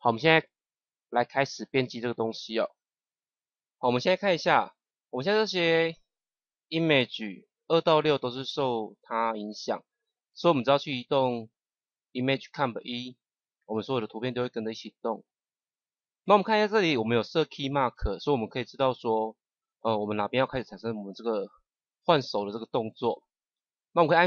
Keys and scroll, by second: 15.4 ctrl+z.